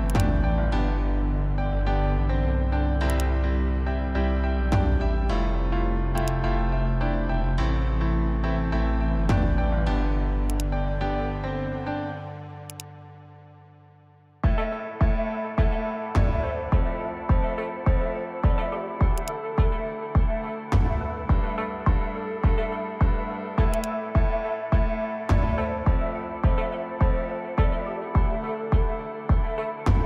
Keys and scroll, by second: 3.7-4.6 typing, 9.1 1, 20.5-21.4 typing.